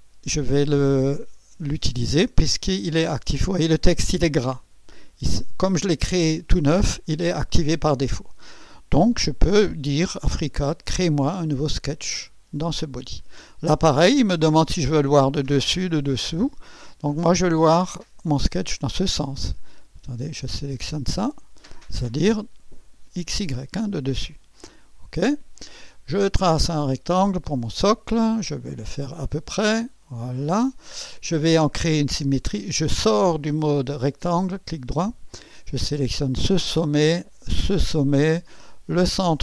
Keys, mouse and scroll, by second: 2.8 click, 12.0 click, 15.3-16.9 drag, 18.4 click, 21.3 click, 24.3 click, 26.8 click, 28.4 click, 29.6 click, 30.0 right click, 34.5 right click, 36.1 click, 37.6 click.